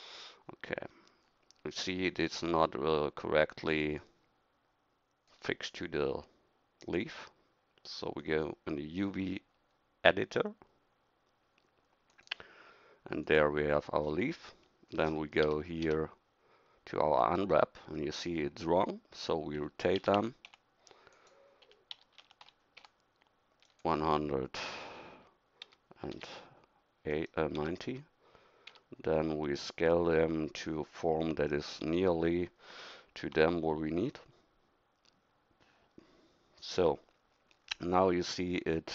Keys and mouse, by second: 14.0-15.4 middle drag, 15.4 a, 15.8 a, 19.6 r, 21.6 r, 25.6 s, 27.6 s, 31.8 s, 33.2 g.